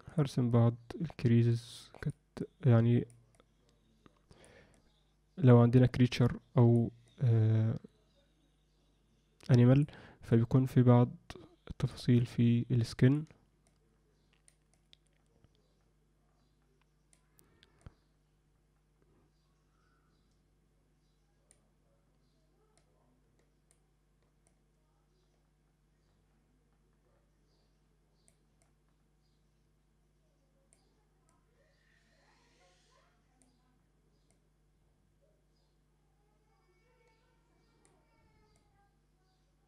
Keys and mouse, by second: 0.5-2.1 drag, 2.4 click, 3.3-4.5 drag, 4.7-6.7 drag, 7.1-9.9 drag, 10.3-11.9 drag, 12.1-13.1 drag, 13.7 click, 14.7-17.1 drag, 17.8-21.5 drag, 22.7-23.7 drag, 24.5-28.3 drag, 28.6-30.7 drag, 31.3-33.4 drag, 34.3-37.9 drag, 38.5-39.6 drag.